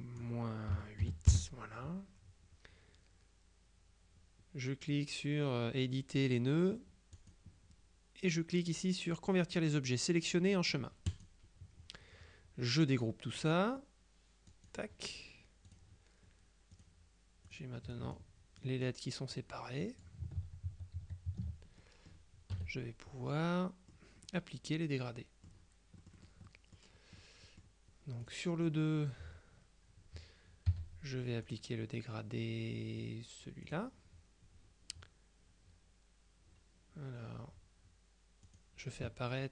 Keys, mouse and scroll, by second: 0.0 click, 0.8 KP_Subtract, 1.1 KP_8, 1.4 KP_Enter, 7.3 click, 11.2 click, 14.6 click, 15.8 click, 16.8 click, 17.6 click, 18.7 click, 19.9 click, 20.4 ctrl+z, 21.9 ctrl+click, 22.6 KP_Subtract, 23.4-24.5 drag, 26.1-27.3 drag, 28.3 click, 30.8 g, 31.6 click, 33.7 click, 38.6 click.